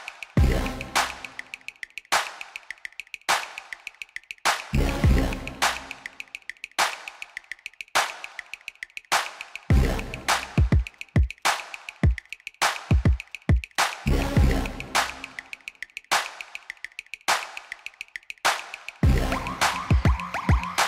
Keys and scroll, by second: 1.8 ctrl+r, 2.8 7, 3.0 5, 3.7 Return, 7.5 3, 12.1 Tab, 17.4-18.7 typing, 19.0 Return.